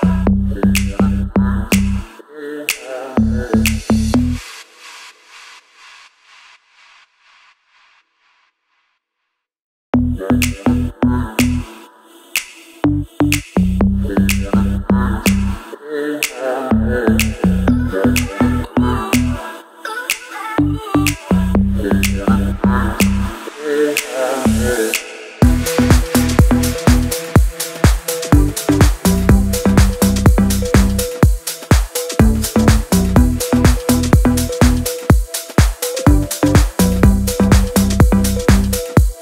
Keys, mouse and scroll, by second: 1.8 scroll up 1, 2.4 t, 4.5 F8, 4.9 click, 5.4-13.0 typing, 13.0 ctrl+a, 13.7 click, 14.3-14.9 scroll up 1, 15.6 click, 17.5-20.8 shift+drag, 22.2-23.6 shift+drag, 24.1 c, 25.2 click, 28.0 click, 29.5 click, 32.4 click, 33.0 scroll down 1, 33.2 click, 33.7 scroll down 1, 34.0 scroll up 1, 34.4-34.8 scroll down 1, 35.3-35.8 scroll up 1, 35.8-36.2 scroll down 1, 36.2-37.0 scroll up 1, 37.0 click.